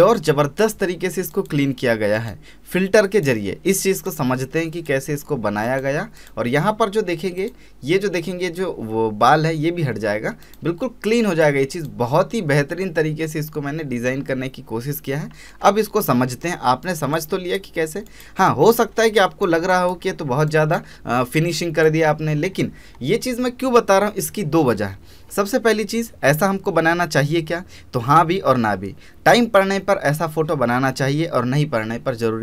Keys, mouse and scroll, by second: 10.4 click, 15.6 alt+space, 15.7-16.1 scroll down 1, 16.1 space, 16.6 alt+scroll down 1, 16.9 space, 17.1 click, 17.4 space, 19.1 click, 19.7 click, 20.1 alt+scroll up 1, 20.5 click, 20.9 alt+scroll up 1, 21.3 click, 22.4-22.9 scroll down 1, 22.9-24.7 scroll up 1, 26.5 scroll up 1.